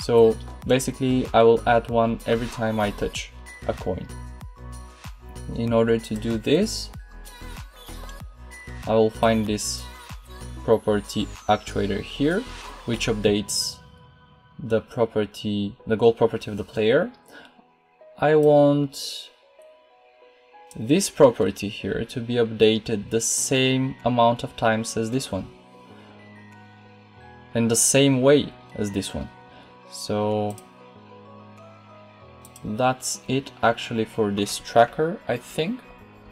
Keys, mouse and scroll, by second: 36.2 p.